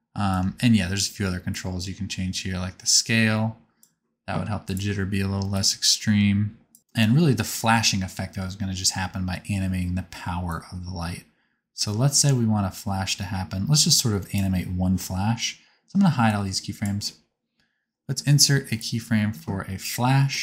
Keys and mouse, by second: 0.4 shift+click, 3.7-4.8 drag, 4.8 middle click, 5.5-7.8 drag, 9.0 space, 14.9-18.9 drag.